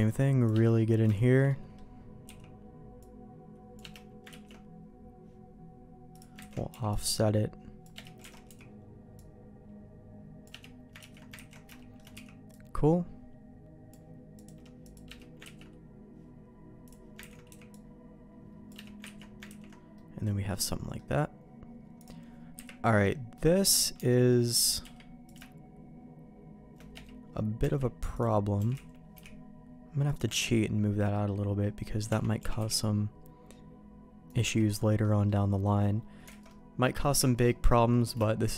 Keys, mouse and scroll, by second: 0.6 middle click, 1.1 shift+middle click, 1.5 middle click, 2.2 c, 4.3 ctrl+q, 6.1 click, 6.5 ctrl+x, 6.7 c, 8.3 alt+a, 8.4 c, 11.0 ctrl+q, 11.3 ctrl+x, 11.7 shift+middle click, 12.1 c, 15.5 ctrl+q, 16.8 click, 17.3 ctrl+x, 17.5 c, 19.2 ctrl+q, 19.5 ctrl+x, 19.9 middle click, 20.5 middle click, 22.0 click, 22.5 KP_Decimal, 23.1 middle click, 23.9 Tab, 24.3 middle click, 24.6-25.6 drag, 24.8 q, 26.9 middle click, 27.6 Tab, 28.1 click, 28.6 g, 30.3 Tab, 31.1 middle click, 32.1 Tab, 32.4 g, 34.4 Tab, 35.0 middle click, 36.3 alt+a, 36.5 middle click, 37.2 shift+middle click, 37.9 middle click, 38.2 shift+middle click.